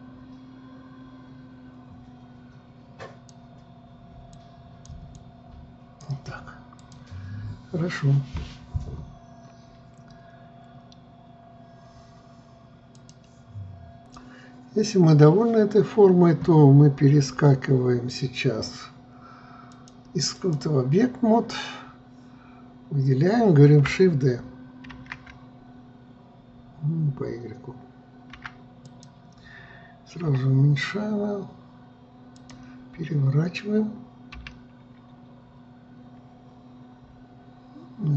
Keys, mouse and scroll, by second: 4.5-10.1 drag, 14.7 click, 20.3-23.4 drag, 25.5 shift+d, 30.9 s, 34.9 r.